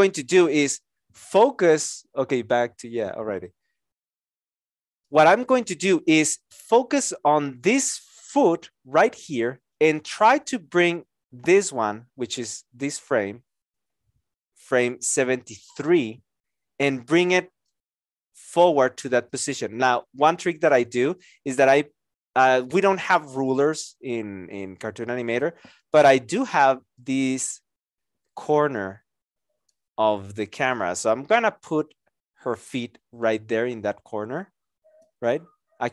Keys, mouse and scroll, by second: 17.7 shift+click.